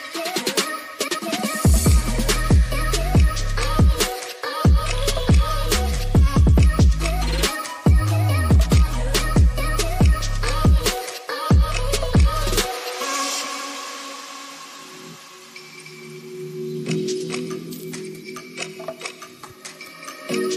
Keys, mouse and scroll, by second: 0.1-2.7 drag, 6.6 click, 7.0-7.6 middle drag, 12.7-13.5 middle drag, 14.9 middle click, 19.7 drag, 19.9-20.5 drag.